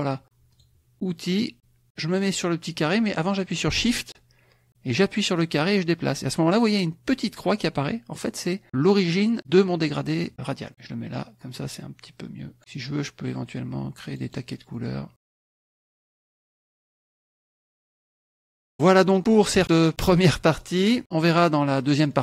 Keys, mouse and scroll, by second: 0.5 click, 5.4-6.7 shift+drag, 9.4-12.6 shift+drag, 14.0 click, 14.7-16.4 drag, 17.1 click, 17.7 ctrl+KP_Subtract, 18.5 ctrl+F1, 18.7 click, 19.1 click, 19.3 click, 20.2-21.6 drag, 21.7 click.